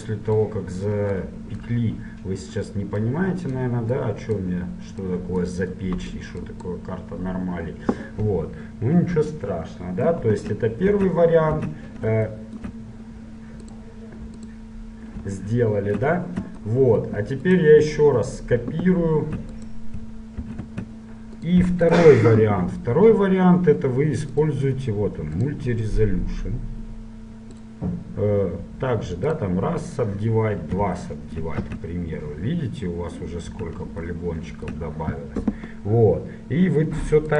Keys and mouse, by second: 3.3-8.3 drag, 8.3-11.4 middle drag, 11.1 Tab, 11.6 Tab, 13.8-15.6 drag, 14.6 Tab, 17.6-19.4 right drag, 20.5 right click, 20.5 shift+d, 21.2 right click, 22.0-23.8 drag, 24.0 middle click, 24.6-27.4 drag, 27.4-29.4 middle drag, 29.4-31.5 drag, 31.5 middle click, 31.8 click, 31.8 z, 33.8 z.